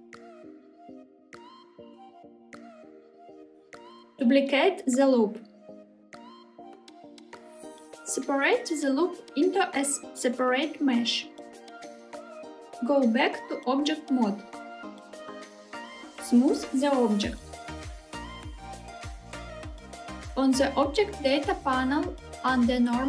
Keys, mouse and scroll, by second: 3.0 click, 4.3 shift+d, 6.6 click, 9.3 p, 14.2 Tab, 16.1-18.9 right drag, 20.2 click, 22.2 click.